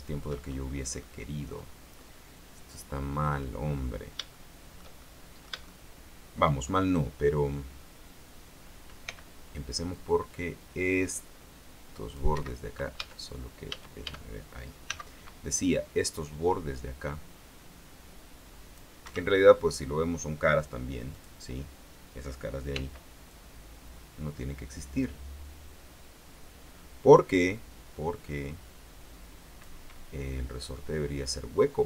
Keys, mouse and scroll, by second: 0.1 shift+middle click, 1.0 scroll up 1, 1.2 middle click, 2.1-3.7 middle drag, 3.8-4.2 scroll up 1, 4.5 shift+middle click, 5.5 shift+middle click, 6.8 shift+scroll up 1, 9.2 c, 10.1-12.5 drag, 12.5 Escape, 13.9 a, 15.0 c, 15.9-19.1 drag, 19.1 Escape, 21.3 click, 22.9 c, 23.5-30.0 drag, 30.8 middle click.